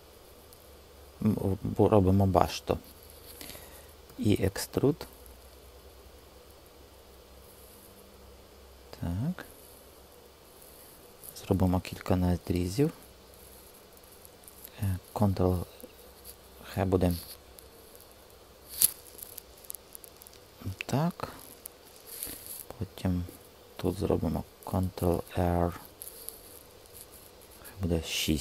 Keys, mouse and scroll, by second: 4.0 e, 6.8 click, 12.5 alt+r, 15.0 alt+r, 25.0 ctrl+r.